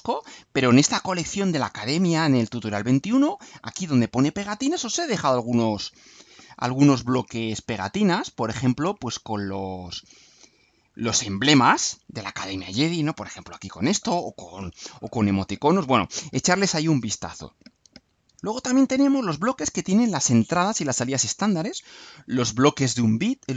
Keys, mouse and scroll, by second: 11.5 click, 13.1 click.